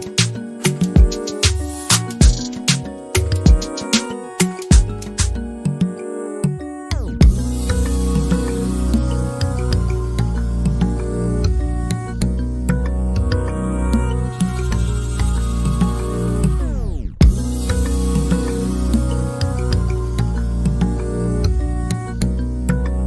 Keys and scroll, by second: 22.4 f.